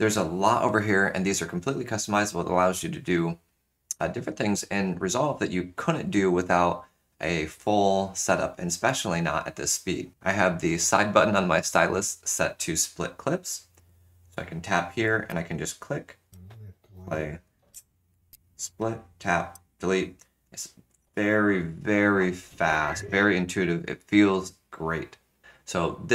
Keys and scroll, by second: 16.2 ctrl+z, 16.3 space, 17.8 space, 19.5 shift+BackSpace.